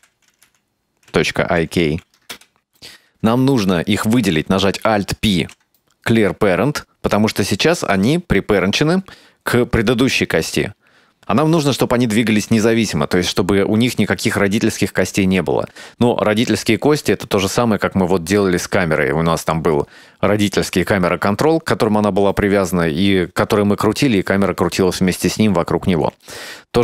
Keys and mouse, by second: 2.6 Tab, 3.2 Tab, 3.7 right click, 5.4 alt+p, 9.8 right click.